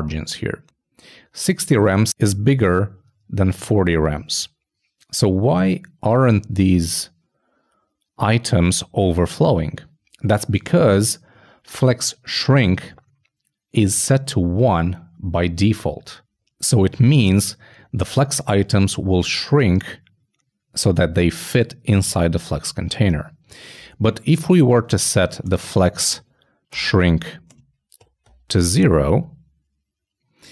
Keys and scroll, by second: 27.2 shift+Return, 27.3 shift+;, 27.6 shift+space.